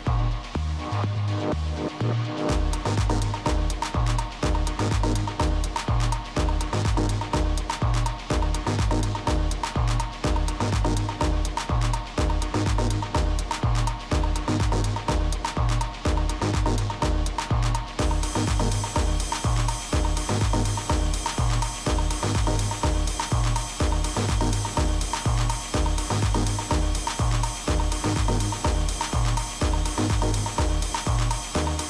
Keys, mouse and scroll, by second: 1.0 KP_3, 2.3-9.1 middle drag, 3.6 z, 9.8-11.7 middle drag, 10.9 a, 11.9-14.1 middle drag, 16.5-19.2 middle drag, 17.1 a, 18.0 a, 24.6 middle click, 25.6 a, 26.0 a, 27.0 Tab, 28.0-29.7 right drag, 30.5 right click, 30.7-31.8 middle drag.